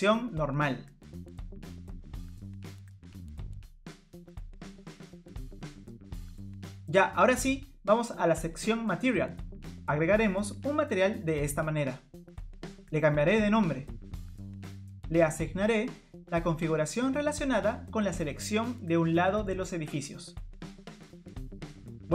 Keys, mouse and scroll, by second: 1.7 middle click, 8.7 click, 11.0 click, 12.1 click, 12.2 click, 15.9 click, 18.4-18.9 scroll down 1.